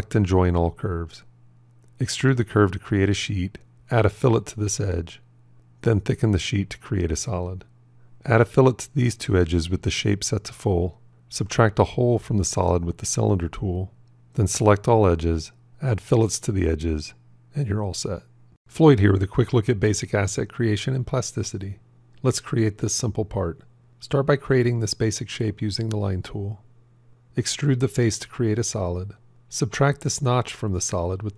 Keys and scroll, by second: 0.5 j, 2.2 e, 23.8 shift+a, 31.0 c.